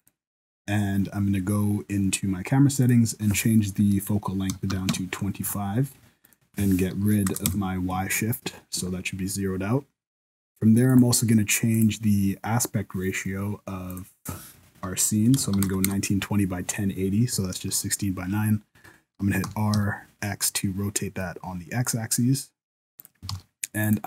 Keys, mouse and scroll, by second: 0.0 click, 2.8 click, 6.2 click, 9.4 scroll up 2, 9.8-10.9 scroll down 1, 10.9 click, 10.9-11.7 scroll down 1, 11.7 click, 13.9 click, 17.2-19.4 scroll up 1, 19.4-20.1 scroll up 1, 19.4 r, 23.3 alt+a, 23.8 right click.